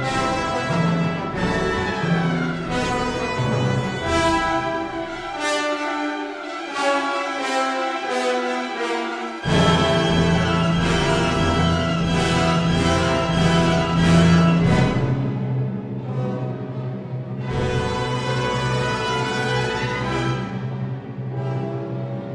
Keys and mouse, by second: 3.5 click, 5.9 ctrl+r, 8.0 click, 10.0 click, 11.9 ctrl+r, 16.1 Tab, 18.9 Tab, 19.8 ctrl+r.